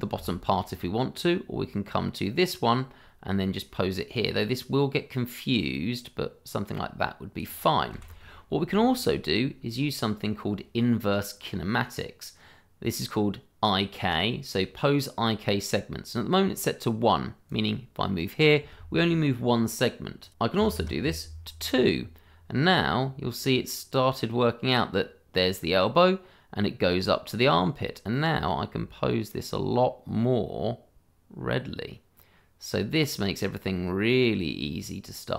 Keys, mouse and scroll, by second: 0.6 middle click, 5.9 click, 7.9 ctrl+z, 8.4 scroll up 1, 8.8 shift+middle click, 9.3-10.0 scroll down 1, 17.5 click, 18.8 ctrl+z, 20.2 click, 20.6 2, 20.8 Return, 23.7 middle click, 27.5 click.